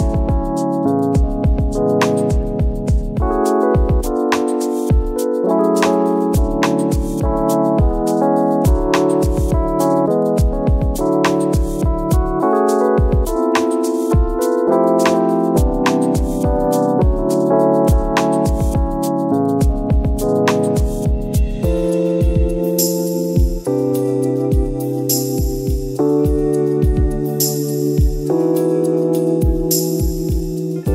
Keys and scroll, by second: 3.8 ctrl+d, 5.6 ctrl++, 5.7 space, 7.6 space, 7.9 space, 9.4 space, 11.5 space, 11.9 ctrl+z, 12.1 space, 12.6 space, 14.6 space, 18.5 ctrl++, 18.6 space, 19.3 space, 19.4 ctrl+-, 19.7 ctrl+e, 24.2 ctrl+-, 25.0 ctrl+e, 25.8 ctrl++, 25.9 space.